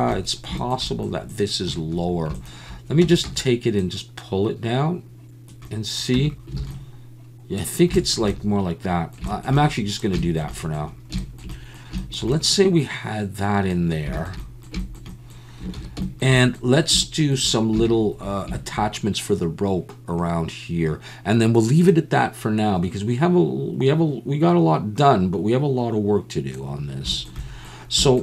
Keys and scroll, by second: 3.0 Tab, 3.2 a, 6.2 Tab, 6.7 alt+a, 15.7 ctrl+s.